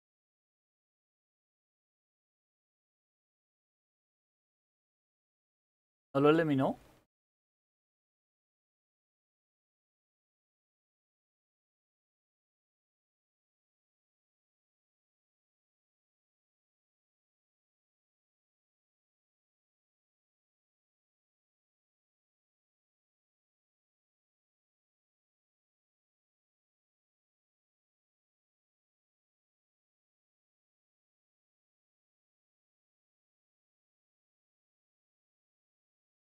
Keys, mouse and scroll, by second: 8.6 Up, 10.2 Left, 10.9 Left, 12.5-14.0 typing, 14.1 Delete, 14.3 Delete, 19.9 Delete, 25.9-34.2 typing.